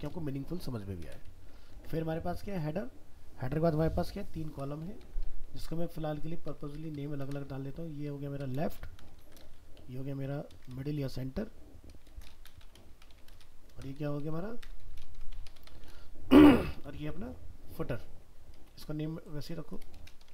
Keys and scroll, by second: 1.7 ctrl+s.